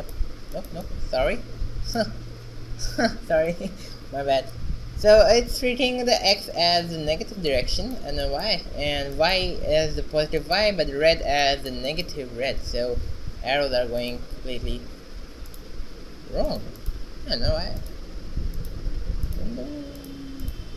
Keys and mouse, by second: 0.8 shift+z, 7.4 shift+z, 12.6-14.2 drag, 15.1-17.0 drag, 17.1-19.4 drag, 19.4 middle click, 20.4 shift+z.